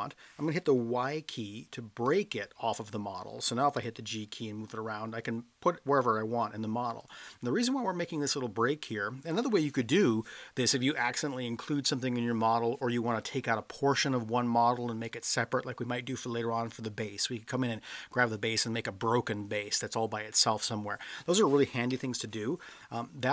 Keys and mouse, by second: 2.0 y, 3.8 g, 7.0 click, 21.9 ctrl+z.